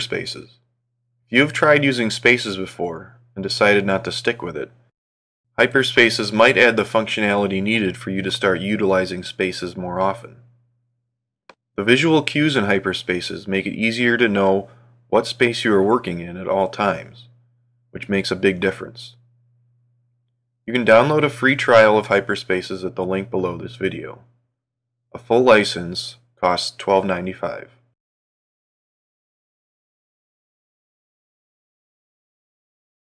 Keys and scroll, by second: 0.6 ctrl+1, 14.5 super+Right, 16.6 super+Down, 18.8 super+Left, 21.1 super+Up.